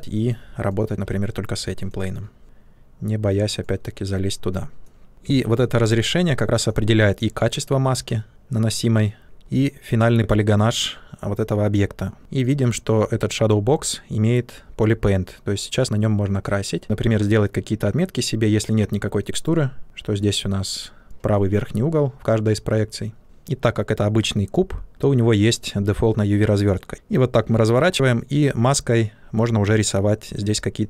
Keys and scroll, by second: 2.4 ctrl+z, 5.2 shift+f, 16.8 ctrl+z, 26.9 ctrl+z.